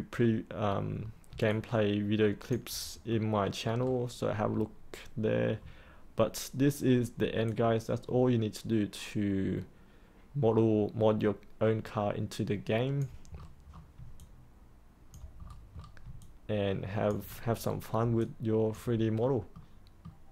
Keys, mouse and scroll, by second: 0.1-0.6 scroll down 1, 0.6-1.2 scroll up 1, 1.4 alt+click, 3.1 middle click, 3.8-4.5 scroll down 1, 4.5-6.4 scroll up 1, 7.4-13.0 alt+drag, 13.3-13.9 scroll down 1, 14.2 alt+click, 15.4-16.0 scroll up 1, 16.2 alt+click, 18.1 alt+click, 19.1-19.5 scroll down 1, 19.5 middle click.